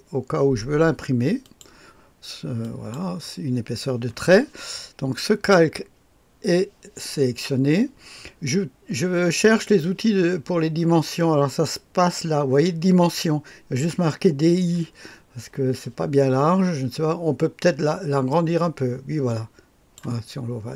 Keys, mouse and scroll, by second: 1.3 click, 2.5 click, 18.2-19.9 drag.